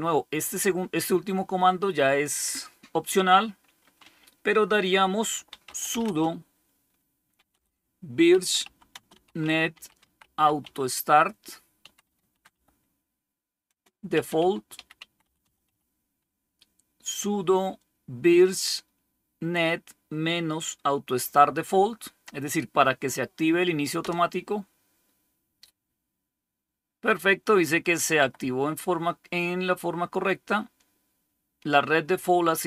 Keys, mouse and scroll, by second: 5.2-16.0 typing, 23.9 Return, 27.9 Up, 28.0 Up.